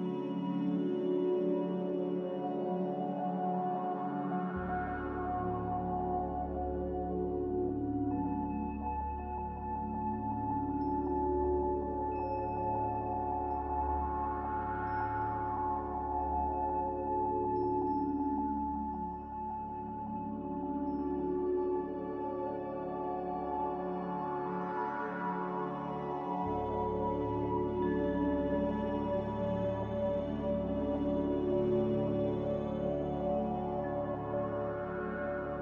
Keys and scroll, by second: 4.1 Delete, 5.5 z, 7.4 typing, 7.7 Return, 11.8 a, 14.6 typing, 14.8 Return, 25.8 typing, 27.5 Return, 31.9 Delete, 33.5 Delete.